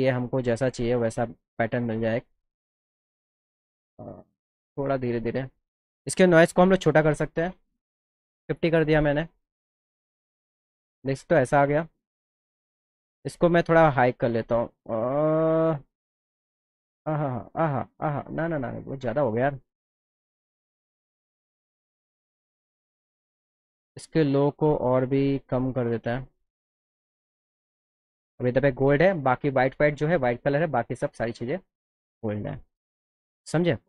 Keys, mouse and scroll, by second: 0.5 click, 0.9 click, 1.6 click, 1.9 click, 2.4 click, 3.6-5.7 drag, 6.0 click, 13.3-16.5 drag, 23.6 click, 27.3 click.